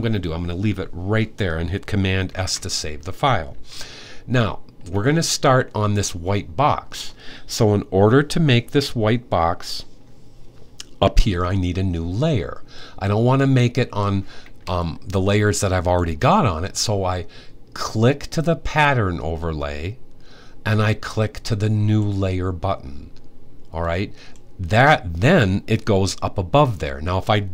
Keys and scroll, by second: 2.0 super+s.